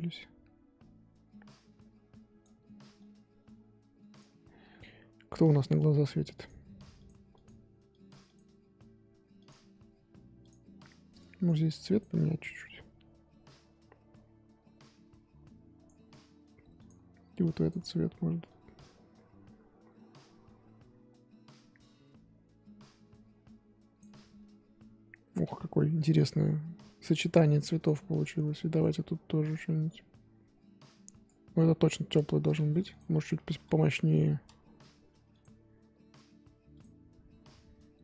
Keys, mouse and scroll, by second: 2.9-6.0 drag, 6.3 click, 7.0 click, 10.4 click, 11.4 click, 11.9 click, 16.7 click, 17.6 click, 27.7 click, 28.7-33.4 drag, 33.4 KP_5, 35.2-36.7 drag.